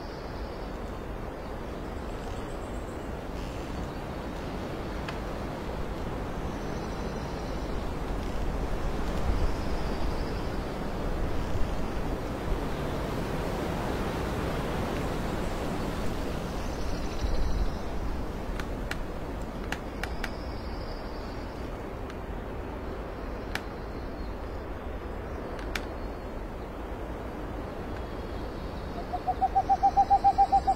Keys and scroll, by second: 0.7 ctrl+j, 2.4 KP_5, 2.5 Return, 4.4 alt+space, 4.9 ctrl+alt+d, 7.2 space, 12.8 alt+space, 15.2 ctrl+j, 17.6 space, 21.1 ctrl+z, 22.7 space, 24.3 alt+space, 27.0 alt+space.